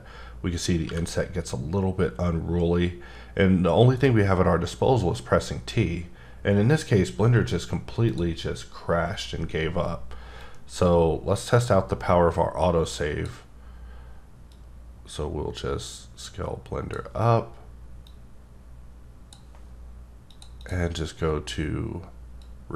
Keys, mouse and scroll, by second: 0.8 t, 10.4 click, 14.5 click, 18.1 click, 20.3 click, 20.6 double click, 22.4 click.